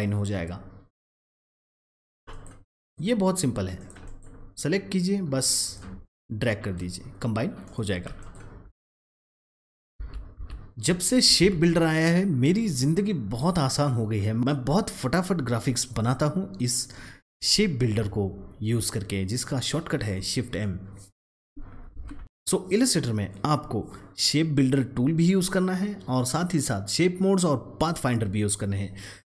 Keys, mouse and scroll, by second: 2.2 double click, 2.7 click, 4.0 double click, 5.6-7.6 drag, 9.6 ctrl+z, 12.8 ctrl+z, 21.8 ctrl+x.